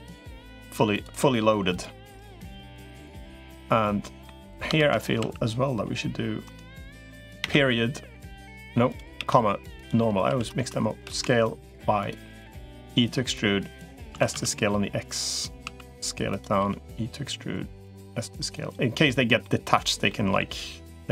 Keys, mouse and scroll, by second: 0.7 click, 1.5 click, 3.1 middle click, 3.8 middle click, 4.7 shift+d, 5.1 s, 10.1 s, 12.3 e, 13.9 s, 15.5 s, 16.5 e, 17.9 s, 19.2 middle click, 19.9 middle click.